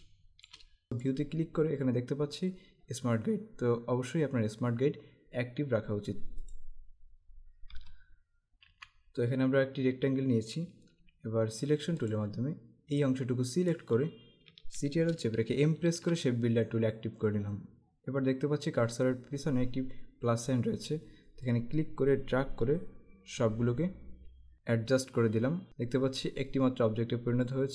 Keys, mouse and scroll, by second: 0.0 space, 0.0 click, 0.5 space, 0.9 click, 6.6 click, 7.9 Escape, 8.7 Delete, 12.1 click, 15.8 shift+m, 21.6 click, 27.5 click.